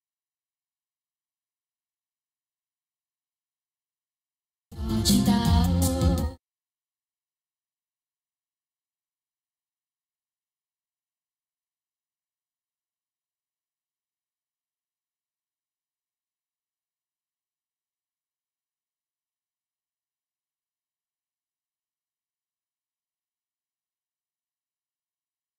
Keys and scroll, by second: 4.7 space, 5.3 Tab, 6.0 space, 10.8 Tab, 11.2 Left, 15.2 Home, 16.3 space, 18.8 ctrl+s, 22.3 ctrl+Left.